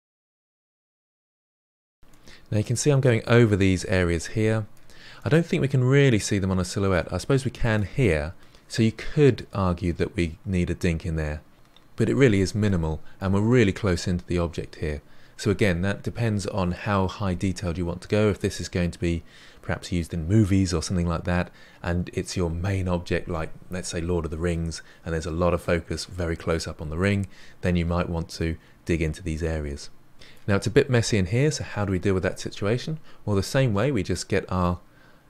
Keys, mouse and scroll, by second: 0.0-1.8 typing, 0.1 middle click, 0.5 middle click, 0.8 middle click, 1.2 middle drag, 2.0-8.6 middle drag, 12.6-15.8 middle drag, 29.3-33.1 middle drag, 33.1-33.7 scroll up 2, 33.7-35.2 middle drag.